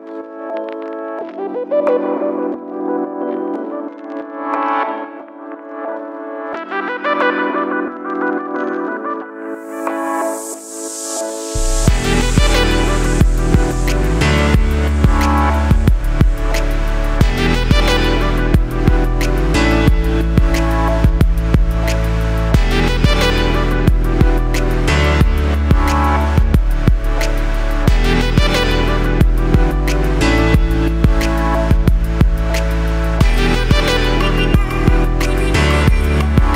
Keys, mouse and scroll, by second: 3.2 right click, 3.6-4.0 scroll down 1, 4.0-9.6 shift+middle drag, 4.2-5.0 scroll up 2, 5.4 scroll down 1, 7.2-7.9 scroll down 2, 7.9-9.1 scroll up 2, 9.1-9.6 scroll up 1, 9.6-11.7 drag, 11.7-15.7 middle drag, 15.7-17.4 drag, 18.2 shift+a, 25.7 click, 26.7-28.0 middle drag, 28.1 click, 30.5 click, 32.6-34.6 drag.